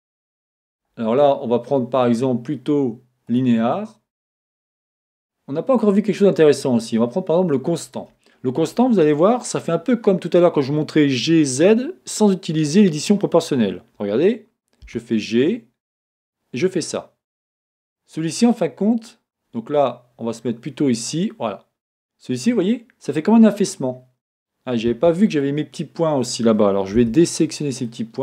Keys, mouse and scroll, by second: 0.6 click, 2.0-28.2 drag, 15.2 g, 25.0 Escape, 27.0 b.